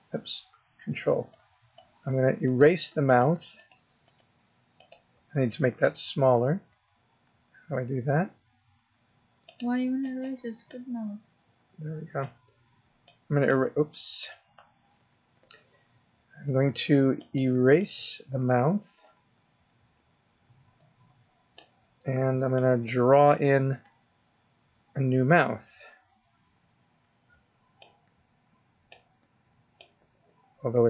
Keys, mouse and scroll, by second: 1.1 ctrl+click, 2.3 ctrl+click, 2.9 ctrl+click, 3.4 ctrl+click, 3.9 ctrl+click, 4.6 ctrl+click, 6.4-6.9 ctrl+scroll down 1, 6.9 ctrl+scroll down 1, 7.2-7.5 ctrl+scroll up 3, 7.5-8.1 ctrl+scroll down 4, 8.1-8.5 ctrl+scroll up 2, 8.5 ctrl+scroll down 2, 9.3 ctrl+click, 9.9 ctrl+click, 10.5 ctrl+click, 12.9 click, 14.8 ctrl+z, 17.0 ctrl+click, 17.6 ctrl+click, 22.4 ctrl+click, 27.6 click, 29.6 click.